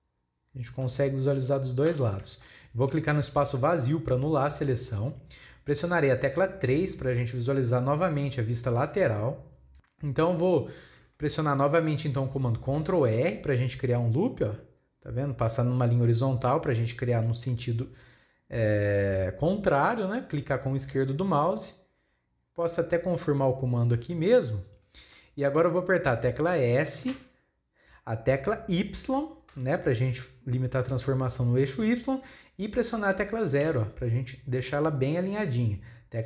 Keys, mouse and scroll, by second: 2.4-5.3 shift+middle drag, 5.3-8.3 drag, 8.9 KP_3, 9.7 shift+middle click.